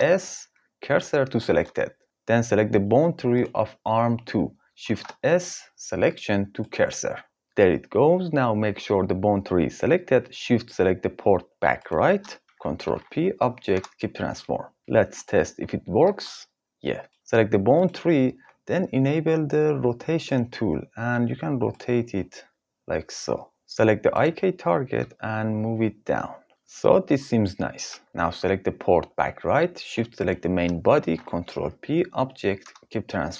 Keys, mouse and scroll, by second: 2.9 click, 4.4 shift+s, 11.4 shift+click, 12.4 ctrl+p, 16.0 g, 17.4 click, 23.7 click, 24.5 g, 26.5 ctrl+d, 27.9 ctrl+s, 30.5 shift+click, 31.7 ctrl+p.